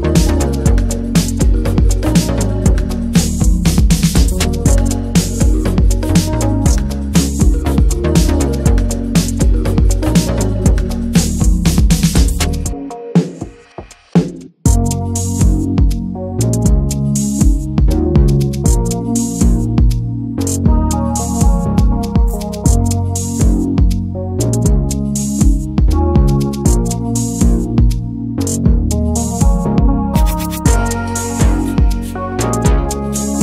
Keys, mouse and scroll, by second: 0.8-1.8 scroll up 1, 1.8-3.7 drag, 3.7 shift+middle click, 4.4-5.7 scroll up 3, 4.6 shift+middle click, 5.0 shift+middle click, 5.7 shift+f, 6.7-8.1 drag, 8.1-8.7 scroll down 4, 8.7 shift+middle click, 9.1-9.8 scroll down 1, 9.8-11.1 scroll up 2, 10.0 shift+middle click, 11.1 ctrl+z, 12.2-14.3 drag, 14.3-14.9 scroll down 7, 14.9 shift+middle click, 15.3 scroll down 1, 15.5-15.9 scroll up 2, 15.9 scroll down 2, 16.2 shift+middle click, 17.1 scroll up 1, 17.3-19.1 shift+middle drag, 19.1-26.7 drag, 26.7 scroll up 1, 26.9 shift+middle click, 27.1-28.0 scroll down 5, 27.5 shift+middle click, 28.0-29.2 shift+middle drag, 29.2-29.9 scroll up 2, 29.3 shift+middle click, 30.3-30.7 scroll up 1, 32.9 scroll up 1.